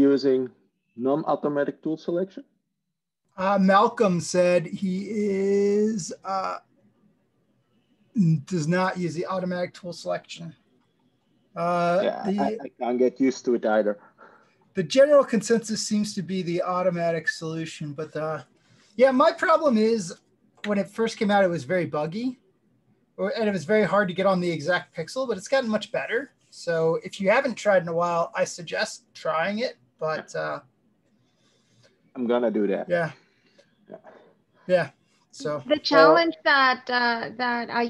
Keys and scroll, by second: 24.3 shift+Tab.